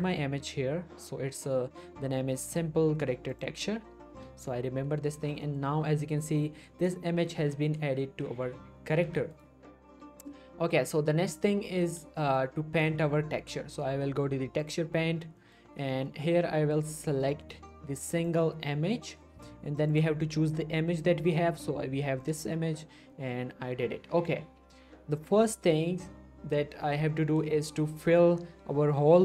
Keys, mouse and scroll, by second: 3.5 click, 4.0-4.5 scroll down 1, 4.5-5.1 middle click, 5.0 scroll up 1, 5.4 middle click, 5.8 scroll down 1, 9.3 right click, 11.8 middle click, 12.2 shift+middle click, 14.6 click, 15.4 middle click, 15.6-16.3 scroll up 2, 15.9 shift+middle click, 16.9 click, 22.2 click, 23.1 middle click, 23.6-24.0 scroll down 1, 27.4 scroll down 1, 27.5 middle click, 27.8 shift+middle click, 28.0-28.9 shift+scroll up 2.